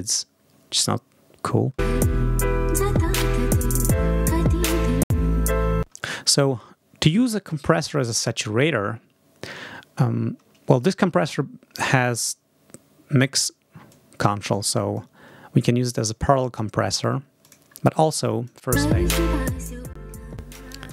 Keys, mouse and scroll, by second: 1.6 space, 5.6 space, 13.7-15.0 drag, 17.2 click, 18.0 click, 18.5 space, 19.1 click, 20.2 click.